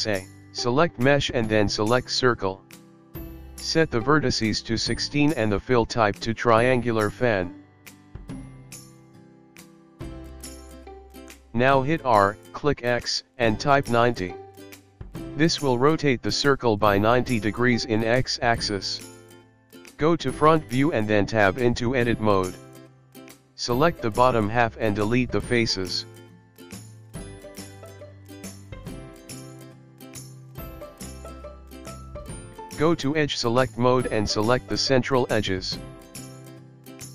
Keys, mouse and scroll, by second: 3.8 r, 7.0 click, 8.0 click, 9.8 click, 12.7 r, 17.1 KP_1, 18.2-20.5 scroll up 4, 20.5 Tab, 21.2 scroll up 3, 22.0-22.8 scroll down 2, 22.8 click, 23.2 click, 25.3 click, 26.0 click, 27.3 Delete, 28.3 scroll down 5, 28.6-29.2 scroll up 3, 29.2 click, 29.9 click, 30.2 click, 30.5-31.0 scroll up 4, 34.0 click, 36.1-36.6 scroll down 4.